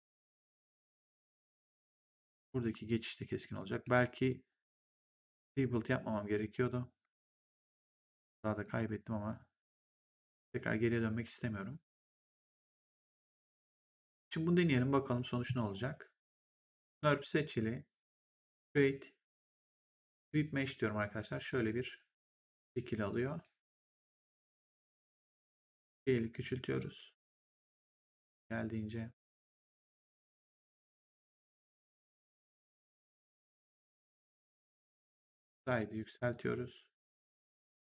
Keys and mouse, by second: 3.1 click, 3.7 w, 4.2 click, 5.3 click, 7.7 click, 13.9 right click, 16.4 click, 18.4 click, 20.2 click, 22.4 right click, 26.4 click, 34.6 click.